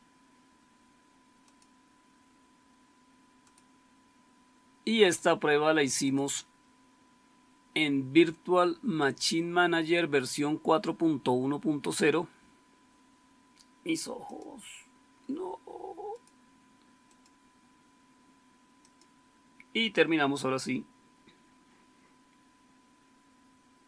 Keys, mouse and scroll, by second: 18.7 click, 23.8 click.